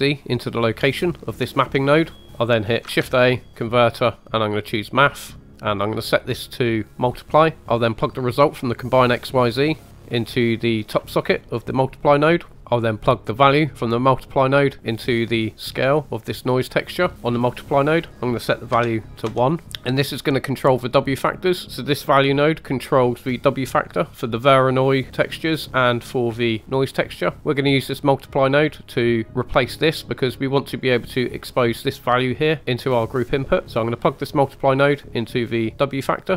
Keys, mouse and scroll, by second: 2.1 middle click, 2.9 shift+a, 5.5 click, 6.2-7.3 drag, 7.6 right click, 8.8 drag, 11.6 click, 12.6-13.6 scroll up 1, 13.6-14.0 drag, 16.1 middle click, 17.1 scroll down 2, 17.9-19.3 drag, 20.4 click, 21.4 middle click, 23.6-26.6 middle drag, 26.6 click, 27.1 middle click, 27.5 click, 29.3 click, 32.2 middle click, 33.1 click, 33.8 middle click, 34.5 click.